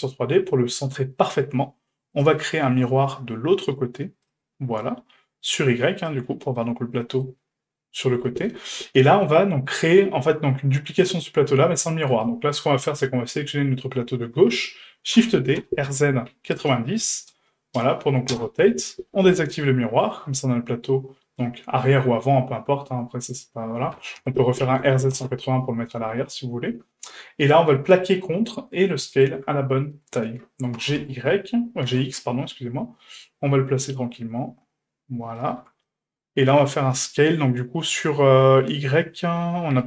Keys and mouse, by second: 2.2-4.3 drag, 5.5 click, 6.0 click, 6.5-7.2 middle drag, 8.2 shift+middle drag, 9.0 middle drag, 12.1 right click, 15.1 shift+d, 21.4-23.3 middle drag, 23.9 r, 26.2-28.2 middle drag, 28.7-29.0 middle drag, 29.1 shift+middle drag, 29.9-30.3 middle drag, 30.7 g, 35.9-36.6 middle drag, 39.7 q.